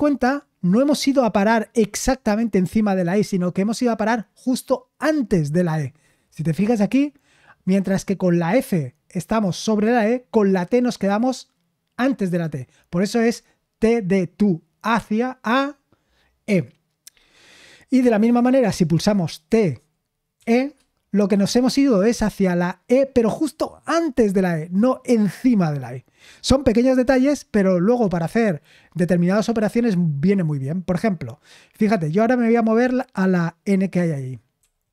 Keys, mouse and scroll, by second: 19.5-20.3 typing, 34.6-34.9 typing.